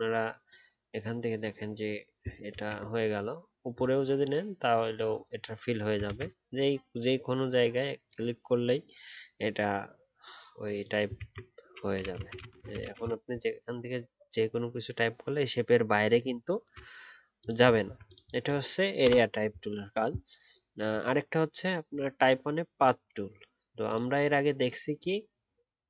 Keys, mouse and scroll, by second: 2.5 ctrl+z, 6.0 ctrl+z, 11.1 ctrl+a, 17.8 alt+scroll down 1.